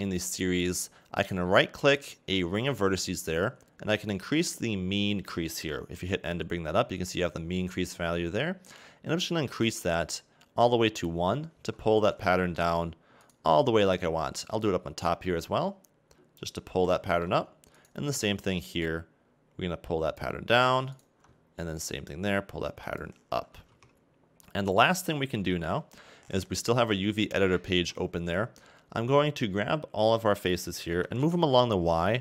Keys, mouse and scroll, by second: 1.8 alt+right click, 6.0 n, 6.3 n, 9.5 click, 12.4 shift+middle click, 13.2 alt+right click, 13.8 alt+right click, 15.2 click, 16.9 shift+middle click, 17.8 alt+right click, 19.0 click, 21.0 alt+right click, 22.0 click, 23.6 a, 23.7 Tab, 24.5 middle click, 25.4 n, 27.8 Tab, 28.6-31.0 scroll up 1, 31.0 g.